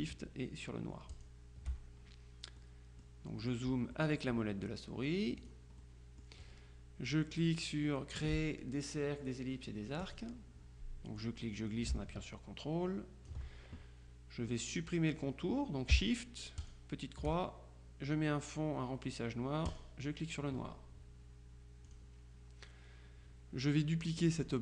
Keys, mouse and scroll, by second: 1.3 shift+click, 2.7-4.1 drag, 5.5 click, 10.1 click, 11.3-13.9 drag, 16.7 shift+click, 19.8 click, 21.9 click.